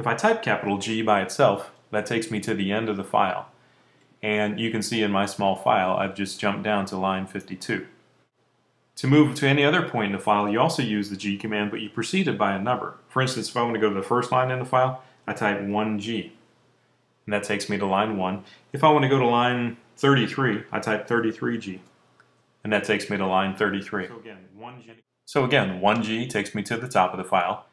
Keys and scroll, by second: 1.3 shift+g, 15.1 1, 15.9 shift+g, 20.9 3, 21.7 shift+g, 24.7 1, 27.4 shift+g.